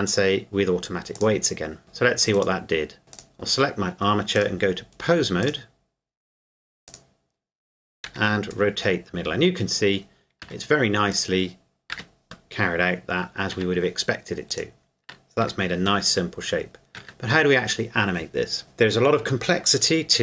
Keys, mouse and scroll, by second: 1.2 click, 2.3 right click, 2.4 right click, 4.4 click, 6.9 right click, 8.1 r, 10.4 Escape, 11.1 right click, 12.0 r, 13.5 Escape, 14.5 right click, 15.4 r, 17.0 Escape.